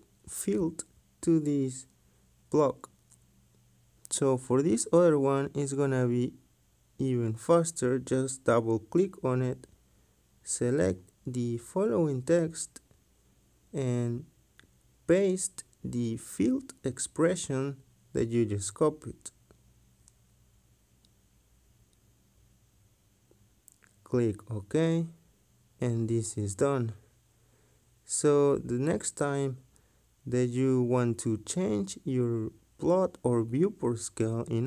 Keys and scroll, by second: 34.0 Escape.